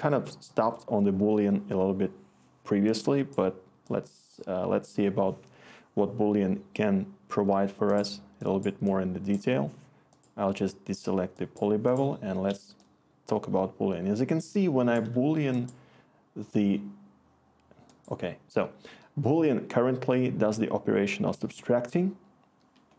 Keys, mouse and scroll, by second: 12.5-13.9 click, 13.0 click.